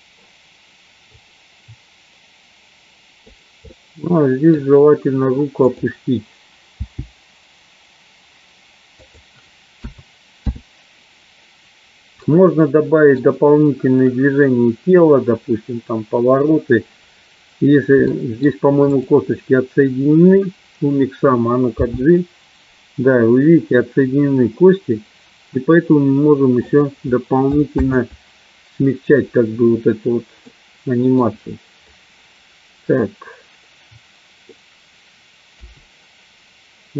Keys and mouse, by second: 4.0 middle click, 5.7 click, 7.2 g, 10.8 i, 12.3-13.3 middle drag, 18.1 middle click, 19.0 click, 22.2 g, 28.7 ctrl+z, 30.6 middle click.